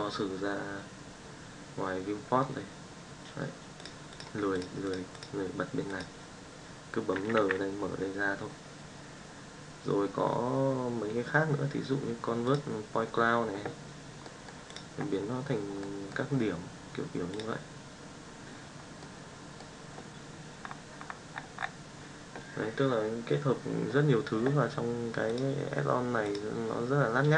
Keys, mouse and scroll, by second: 4.5 click, 4.8 click, 5.1 click, 7.1 n, 7.3 n, 12.4-13.7 drag, 14.1 middle drag, 15.8 middle click, 18.9-19.5 middle drag, 25.2-26.3 drag.